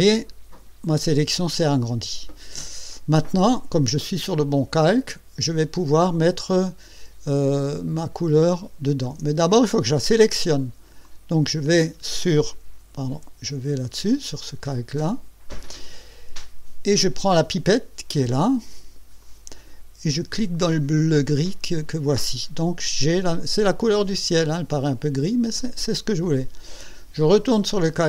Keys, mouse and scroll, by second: 8.3 ctrl+scroll down 2, 11.0 click, 13.1 Escape, 15.1 click, 19.2 click, 21.4 click.